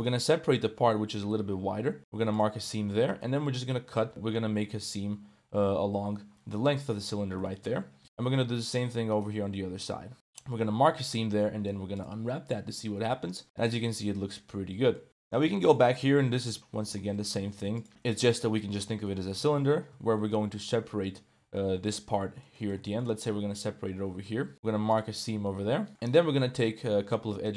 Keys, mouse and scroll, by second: 1.4 u, 2.8 2, 3.1 right click, 3.8 u, 6.6 Tab, 6.8 middle click, 7.4 shift+middle click, 7.8 Tab, 8.2 shift+middle click, 9.1 alt+shift+click, 9.8 u, 10.9 a, 11.3 u, 13.1 Tab, 13.4-15.0 middle drag, 15.1 right click, 15.2 Tab, 15.7-17.9 typing, 16.0 ctrl+s, 18.1 click, 18.3 middle click, 18.6 middle click, 19.1 click, 19.4 Tab, 19.6 shift+click, 20.0 Tab, 20.1 click, 20.8 1, 21.4 2, 21.7 1, 21.8 alt+click, 22.1 middle click, 22.6 middle click, 22.9 shift+click, 24.3 u, 25.3 middle click, 27.1 1, 27.3 click.